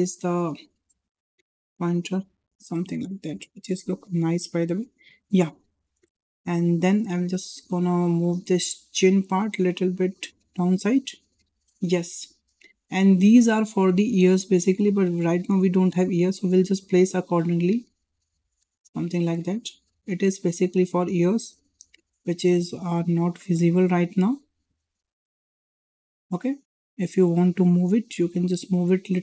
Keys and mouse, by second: 2.3 s, 5.3-5.9 shift+middle drag, 7.6 click, 7.6 click, 8.5 g, 9.5 click, 9.8 g, 12.7 shift+middle click, 15.0-15.6 drag, 16.7-17.3 drag, 17.8-18.2 drag, 18.8 click, 19.5 g, 22.0-25.9 middle drag, 27.1-27.4 shift+middle drag, 28.0 shift+click, 28.4 middle drag, 29.0-29.2 drag.